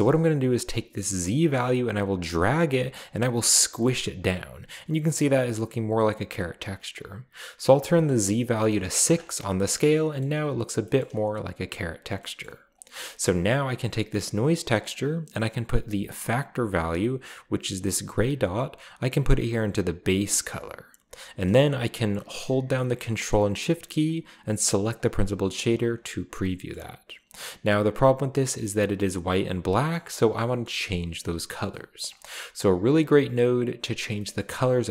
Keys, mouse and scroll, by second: 1.4-6.3 drag, 7.8 click, 9.0 click, 9.6-10.2 scroll down 2, 10.3-11.5 scroll up 1, 10.8 shift+middle click, 11.5 scroll down 1, 11.6 shift+middle click, 11.6 shift+scroll, 11.7-12.1 scroll down 3, 12.4-12.9 middle drag, 12.7 click, 13.6 click, 18.5-20.7 drag, 24.9 ctrl+shift+click, 25.4 click, 26.7-27.0 middle drag, 29.9 middle click, 30.4-31.5 scroll up 3, 30.6-31.2 middle drag, 32.0 middle click, 32.3-33.0 drag, 32.9 g, 33.2 click, 34.4-34.9 middle drag, 34.6-34.9 scroll down 1.